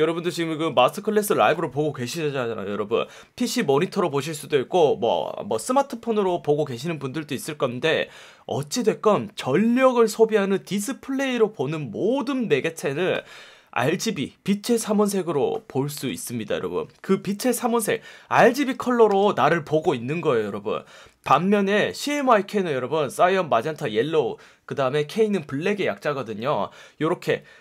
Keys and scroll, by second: 18.5 F1, 19.1 F1.